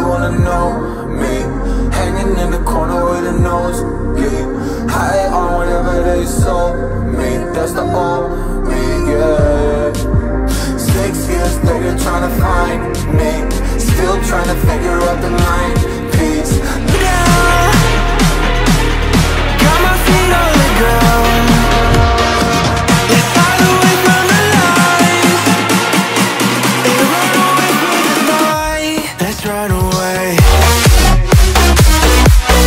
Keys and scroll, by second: 3.6 space, 4.8 space.